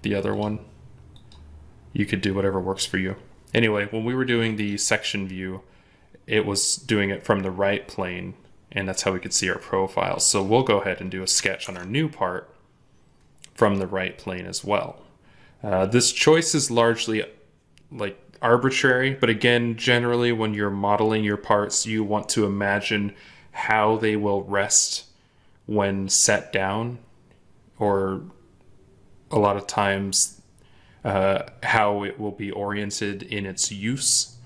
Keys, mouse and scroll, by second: 11.5 ctrl+Tab.